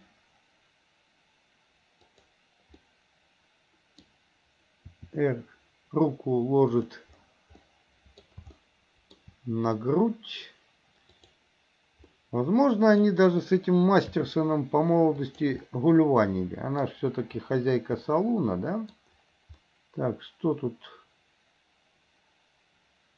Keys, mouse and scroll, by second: 3.0-4.3 middle drag, 5.1 r, 7.7 middle click, 8.8-9.3 shift+middle drag, 11.1 click, 12.2-13.1 middle drag, 14.3 r, 15.8-17.1 middle drag, 18.2-19.2 middle drag, 19.8-23.1 middle drag.